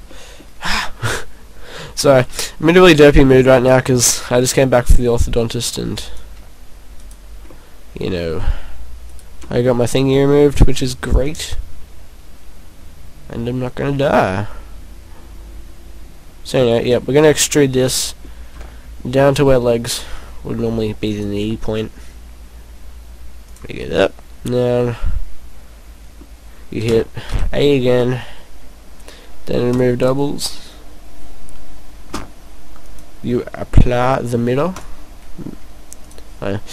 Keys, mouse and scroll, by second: 0.1 middle click, 1.1-1.4 scroll up 2, 2.2 b, 3.1 right click, 3.6 right click, 4.0 b, 7.1 shift+right click, 7.5 middle click, 9.1 shift+right click, 9.5 scroll down 1, 9.6 middle click, 10.1-10.7 scroll down 4, 10.6 middle click, 11.2 click, 17.8-18.2 scroll down 2, 18.0 middle click, 18.7 e, 20.0 click, 20.2 e, 21.2 click, 21.6 e, 23.6 click, 23.9 middle click, 26.9 a, 27.4 a, 29.7 click, 32.9 click, 34.8 click, 36.3 click.